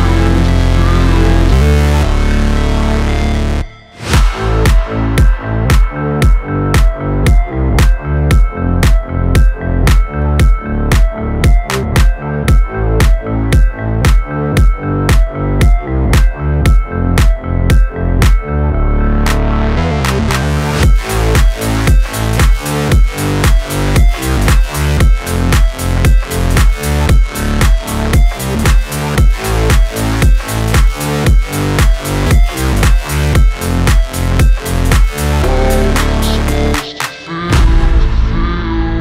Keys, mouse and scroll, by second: 0.1 shift+Page_Down, 2.0 click, 2.5 ctrl+c, 2.7 ctrl+v, 4.7-7.3 drag, 5.9 space, 7.8-11.3 drag, 11.3 shift+Down, 12.9 click, 13.3 space, 15.2-19.3 drag, 19.8 shift+Up, 21.5 click, 21.7 space, 23.9-27.0 drag, 27.0 shift+Down, 28.9 shift+Up, 29.4 click, 30.3 shift+Down, 32.0-33.6 drag, 33.6 shift+Down, 34.1 shift+Up, 35.0 click, 35.2 space, 37.3-39.0 drag.